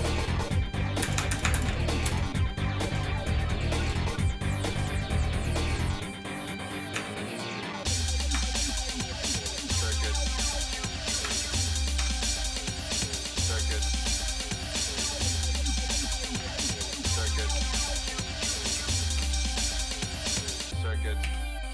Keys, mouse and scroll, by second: 3.9-10.5 drag, 11.2 Tab, 12.0 Tab, 13.5 middle click, 14.6 ctrl+a, 16.1 click, 16.4 Tab, 17.6 a, 18.7 r.